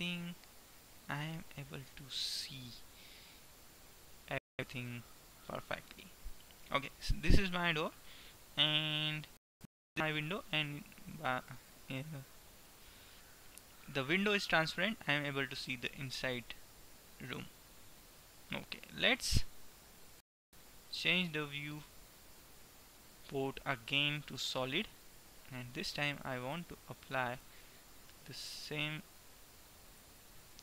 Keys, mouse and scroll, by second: 0.1-2.1 middle drag, 5.1-8.0 middle drag, 8.5-9.5 middle drag, 14.5-16.1 middle drag, 18.0 middle click, 21.0-23.6 drag, 23.6 middle click, 25.1-26.5 middle drag, 26.5 right click, 26.8 middle click, 27.0-29.1 right drag, 29.0 click, 30.0-30.6 drag.